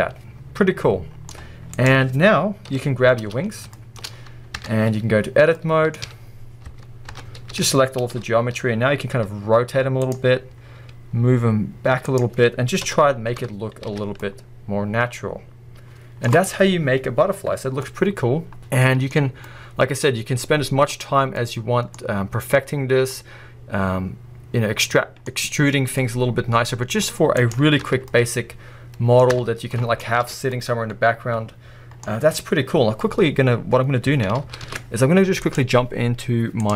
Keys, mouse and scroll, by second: 1.9 click, 2.7 KP_7, 3.4-3.8 scroll up 2, 3.7-4.1 shift+middle drag, 4.6 Tab, 5.6 middle click, 6.1 a, 6.7 Tab, 7.5 a, 8.1 KP_7, 9.1 r, 10.2 scroll, 10.8 g, 12.2 click, 13.4 Tab, 13.6-13.9 scroll down 1, 13.9 alt+a, 14.2-18.0 middle drag, 18.6-27.5 middle drag, 19.1-19.6 scroll up 1, 22.0-22.7 scroll up 1, 22.7-23.1 scroll down 1, 27.0-27.5 scroll up 1, 27.5 drag, 27.8 Tab, 28.1-29.3 middle drag, 29.3 Tab, 29.5 scroll down 1, 29.7-35.3 middle drag, 30.3 alt+a, 30.4 scroll down 1, 32.0-33.3 scroll up 1, 33.3-35.3 scroll up 1.